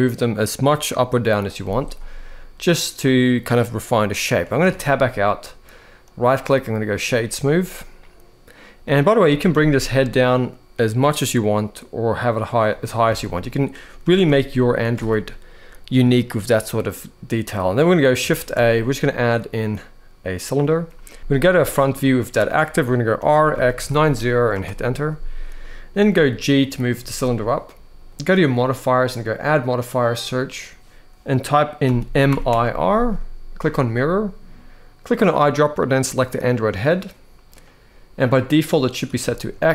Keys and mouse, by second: 1.1 click, 4.4 Tab, 5.9-6.7 right drag, 8.9 g, 9.2 z, 12.8 alt+a, 13.7 r, 13.9 r, 14.7 alt+a, 18.1 shift+a, 21.0 Return, 21.0 ctrl+z, 21.0 KP_1, 21.3-21.6 shift+middle drag, 22.9 r, 23.3 x, 23.5 9, 23.6 0, 24.3 Return, 25.7 g, 26.3 click, 26.7 shift+middle drag, 28.9-33.6 drag, 34.8 click, 39.1 shift+middle drag.